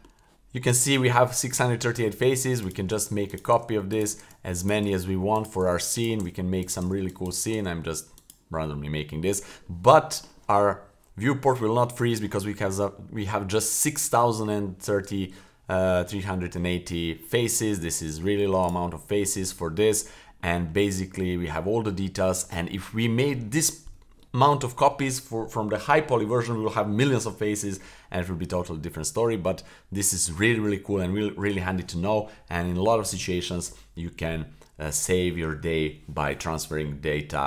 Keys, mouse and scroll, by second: 2.2-7.6 typing, 3.7 click, 9.0 scroll down 1, 9.2-9.5 middle drag, 9.7 middle drag, 10.1 middle click, 10.4 middle click, 10.8-11.2 middle drag, 11.4-12.2 middle drag, 16.9 middle drag, 17.5 middle click, 17.6 scroll down 1, 17.8-18.4 middle drag, 18.6 right click, 18.9-19.3 middle drag, 19.4 middle drag, 19.6-20.4 scroll up 3, 20.4-20.7 middle drag, 20.9-21.2 scroll down 1, 21.2 middle drag, 21.7 middle drag, 22.1-22.5 scroll down 2, 22.5-22.8 middle drag, 23.0 middle drag, 23.5 middle drag, 24.2 middle drag, 28.5 middle click, 28.7 scroll down 1, 29.0 middle click, 29.3-29.7 scroll up 1, 29.7 middle click, 30.5-30.9 middle drag, 31.1 middle drag.